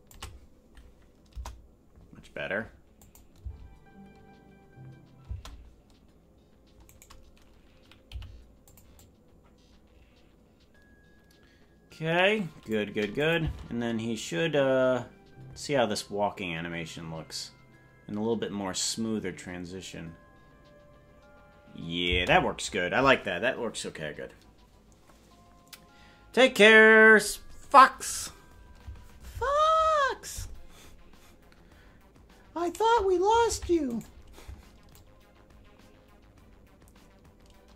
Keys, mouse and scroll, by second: 1.2 KP_0, 3.0 click, 3.3 space, 5.2 space, 6.8-8.0 right drag, 8.0 g, 8.9-12.7 drag, 13.1 click, 13.4 space, 32.7 right click, 33.5 ctrl+Tab, 34.0 right click, 34.9-37.7 drag.